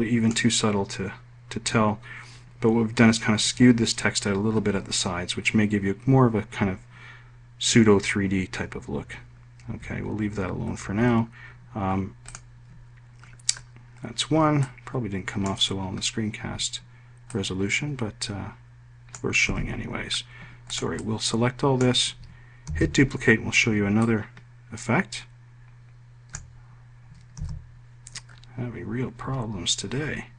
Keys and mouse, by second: 19.8 ctrl+z, 21.0 click, 21.3 click, 22.9 ctrl+d, 25.3-26.9 ctrl+drag, 27.7 z.